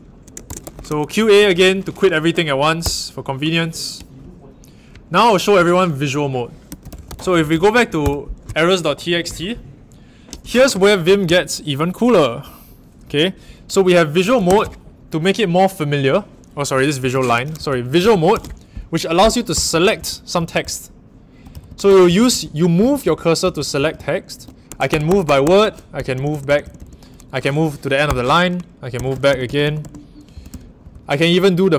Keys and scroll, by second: 0.2-1.3 typing, 2.8 Return, 6.4-8.0 typing, 14.4 shift+v, 17.0 Escape, 17.3-26.7 typing, 28.0-31.7 typing.